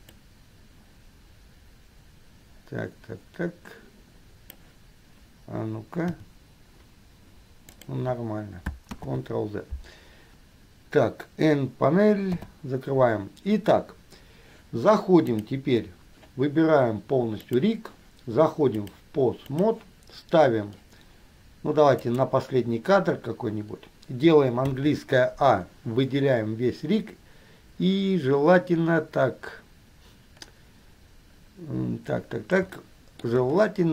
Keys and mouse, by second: 0.3-4.7 drag, 6.3 r, 9.2 ctrl+z, 12.4 n, 15.6 click, 18.9-19.9 drag, 22.2 click, 24.8 a.